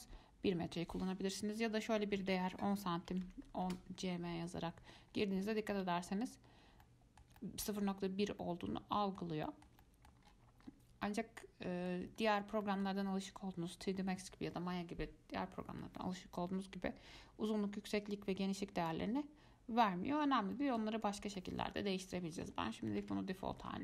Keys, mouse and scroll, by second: 5.1-6.1 scroll up 10, 6.1-6.8 scroll down 2, 7.0-8.1 shift+middle drag, 8.1-8.6 scroll up 5, 8.6-10.4 middle drag, 10.4-11.3 scroll down 11, 11.3-12.4 middle drag, 12.4-12.8 scroll up 4, 12.8-15.9 middle drag, 20.3-20.8 scroll down 5, 20.8-22.3 middle drag, 22.3-23.8 drag.